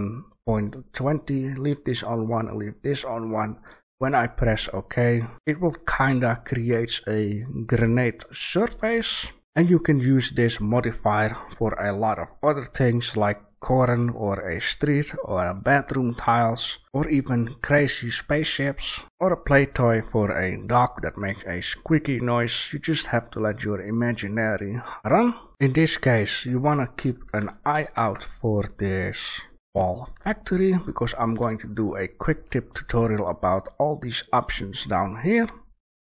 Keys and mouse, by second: 6.2-8.0 middle drag, 8.3-9.0 middle drag, 9.4-19.8 middle drag, 20.4 click, 25.5 Delete, 26.6 click, 27.2 Delete, 27.9 shift+a, 35.7-36.0 drag.